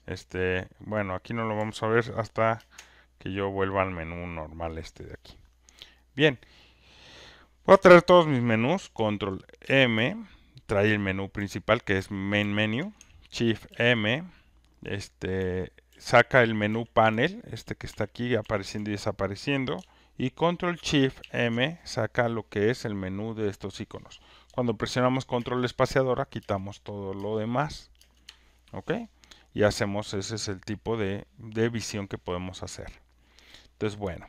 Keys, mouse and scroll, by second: 0.0 click, 2.5 ctrl+space, 4.0-5.0 drag, 9.9 ctrl+m, 10.9 ctrl+m, 11.3 ctrl+m, 11.9 ctrl+m, 12.4 ctrl+m, 15.4-18.8 typing, 21.2 m, 25.5 ctrl+space, 26.4 ctrl+space, 27.1 ctrl+space, 28.0 ctrl+space.